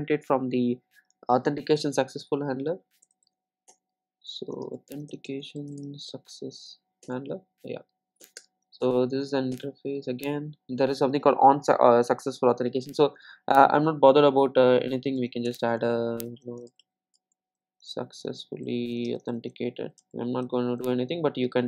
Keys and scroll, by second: 3.7 Return, 15.5 Tab.